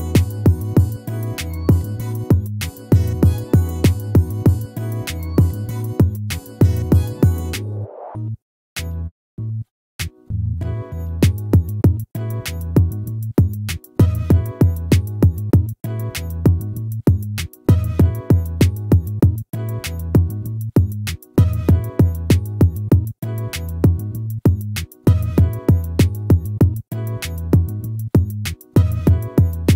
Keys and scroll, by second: 0.2 ctrl++.